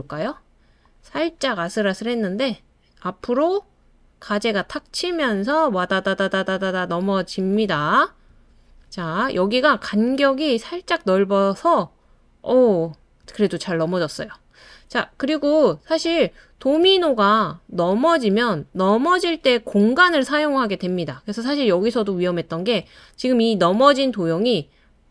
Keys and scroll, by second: 4.9 typing.